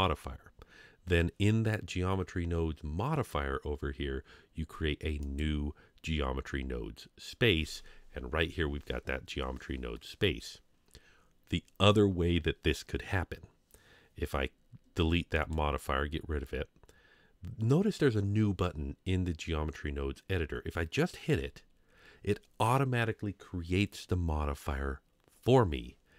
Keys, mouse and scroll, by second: 5.2 click, 15.3 click, 21.1 click.